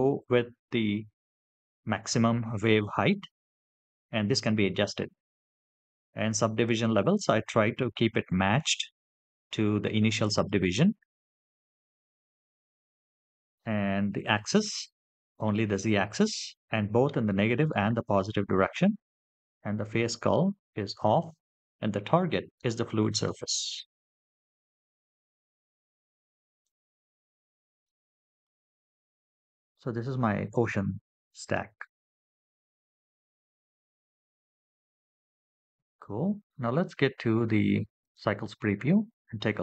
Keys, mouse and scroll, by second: 6.8-9.9 scroll up 2, 10.7-11.7 scroll down 2, 11.7-12.7 scroll down 1, 19.1-22.2 scroll down 2, 24.7-26.4 scroll up 2, 26.4-27.8 drag, 28.2-29.5 scroll up 4, 32.8-36.6 scroll down 7.